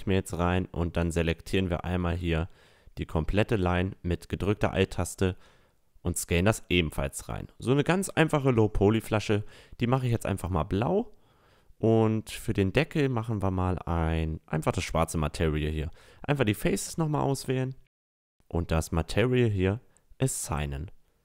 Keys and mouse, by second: 0.0 a, 0.6-2.5 right drag, 1.2 a, 2.2 click, 3.6 s, 4.1 right click, 6.0 s, 6.1 a, 6.4 Tab, 6.6 middle click, 8.7-10.3 drag, 12.1-14.6 drag, 14.5-15.9 middle drag, 14.5 right click, 14.8 Tab, 15.9-17.7 drag, 16.7-18.5 right drag, 18.2-21.2 drag, 18.9-20.6 right drag, 20.3 Tab, 20.9 a.